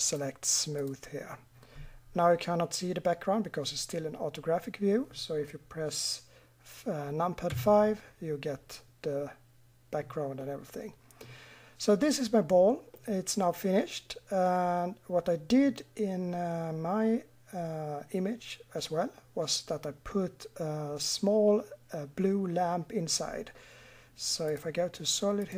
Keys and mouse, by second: 7.5 KP_5, 13.8 middle click, 14.2 middle click.